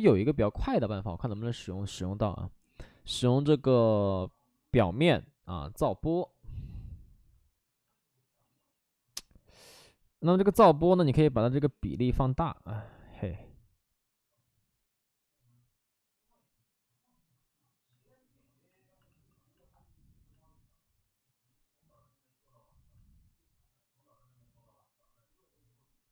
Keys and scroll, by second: 0.0 ctrl+z, 19.1 f.